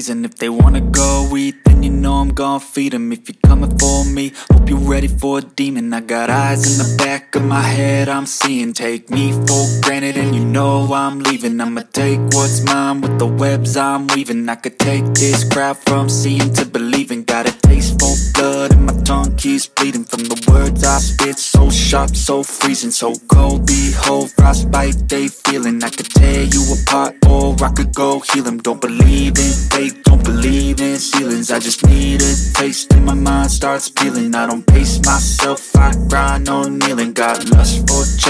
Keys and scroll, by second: 15.5 Delete, 18.1 Delete, 27.4 F2, 28.6 Escape, 30.0 Delete, 35.7 space.